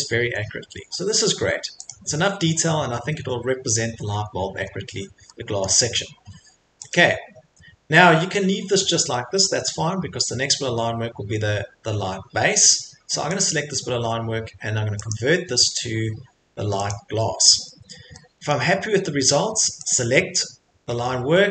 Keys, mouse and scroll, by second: 0.0 middle click, 0.2 Escape, 1.9 click, 1.9-2.6 scroll, 2.6 Escape, 3.5 scroll, 4.1-5.0 scroll, 5.6 scroll, 5.7 Escape, 6.9 click, 7.5 Escape, 8.6 middle click, 8.7 middle click, 9.6 middle click, 9.6-10.1 scroll, 12.4 Escape, 13.4 click, 15.1 click, 16.9 click, 17.3 Escape, 17.6 Escape, 18.5 middle click, 19.9 click.